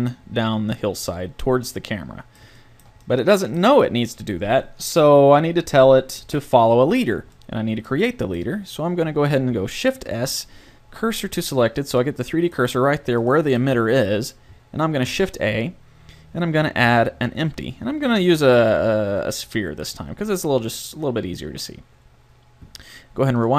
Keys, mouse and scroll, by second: 1.4 middle click, 6.2 KP_7, 10.1 shift+s, 15.1 shift+a, 20.5 middle click, 23.3-23.5 drag.